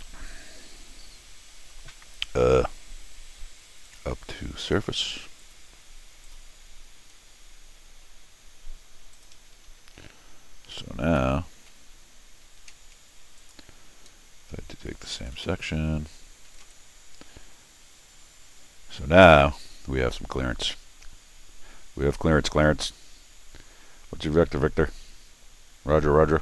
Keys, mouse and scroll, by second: 3.9 click, 5.4 click, 6.2 click, 9.1 click, 11.0 shift+Tab, 12.4 Escape, 13.4 click, 15.2 click, 15.4 n, 16.5 Down, 16.7 Down, 17.7 scroll down 2, 18.2-18.6 scroll up 4, 19.8-20.2 scroll up 1, 20.2 scroll down 1, 21.5 scroll down 1, 22.5-22.9 scroll up 2, 23.8 scroll down 2, 25.0-25.4 scroll up 4, 25.1 middle click.